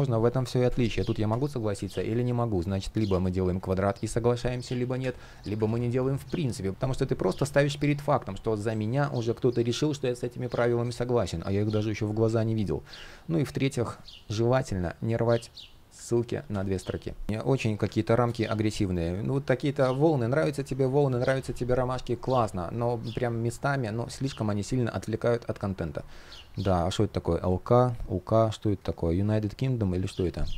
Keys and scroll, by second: 1.6 super+z, 4.6 super+z, 5.3 super+z, 16.1 super+z, 17.6 super+z, 30.4 super+z.